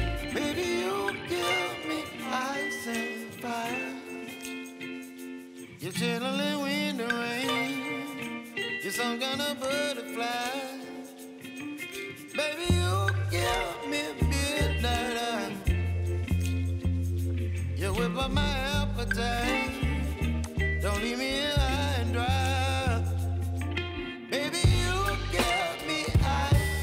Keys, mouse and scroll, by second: 0.3 r, 6.7-9.7 middle drag, 9.7 click, 9.9 scroll up 2, 10.7-11.0 scroll down 2, 11.0-12.6 middle drag, 12.6-13.5 scroll down 2, 13.5-14.2 drag, 14.2-15.0 scroll down 4, 15.0-20.5 middle drag, 20.5-21.8 drag, 21.8-23.1 scroll up 9, 23.3 scroll down 1.